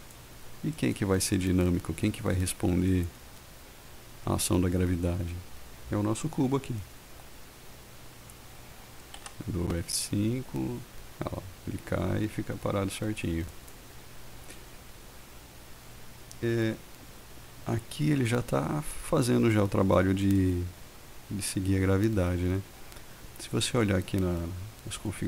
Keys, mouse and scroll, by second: 0.9 click, 3.1 click, 9.4 F5.